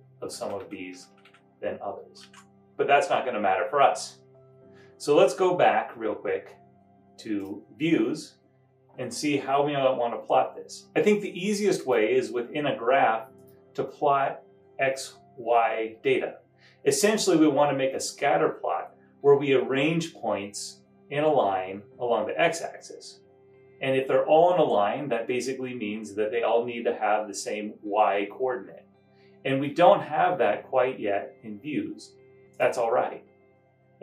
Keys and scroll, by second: 0.4 Left, 1.1 Left, 2.3 super+Down.